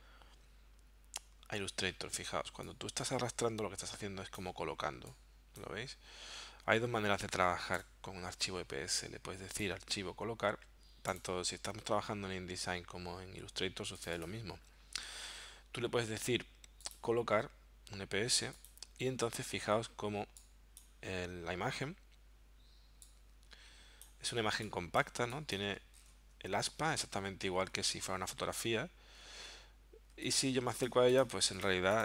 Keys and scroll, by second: 2.8 <, 7.8 BackSpace, 30.2 z.